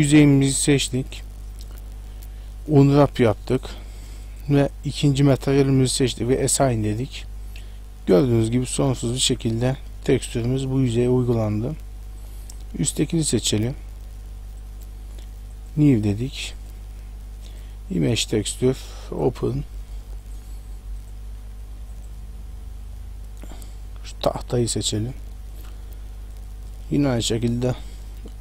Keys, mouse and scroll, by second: 1.8 u, 4.3 click, 6.0 click, 6.8 middle click, 9.4-9.8 scroll up 2, 10.2 middle click, 11.6-12.0 scroll down 1, 12.0 shift+middle click, 12.9 right click, 13.4 middle click, 14.6 click, 15.5 click, 16.6 click, 18.7 click, 19.1 click, 24.6 click, 24.6-25.0 scroll down 5, 27.1 u.